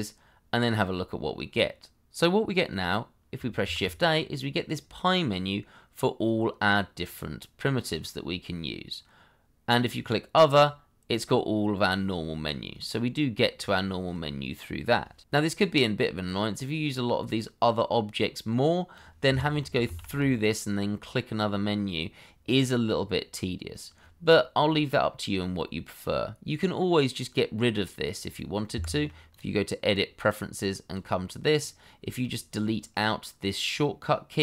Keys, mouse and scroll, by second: 3.6 shift+a, 19.3 Escape, 19.8 shift+a, 28.7 Escape, 32.0-34.4 scroll down 1.